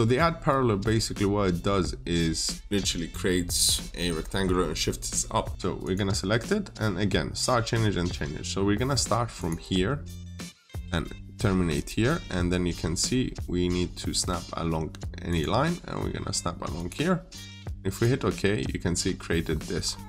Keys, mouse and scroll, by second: 5.6 click, 12.4-14.4 scroll up 1, 15.1 click, 18.5-18.8 scroll up 1, 19.3 scroll down 1, 19.9 middle click.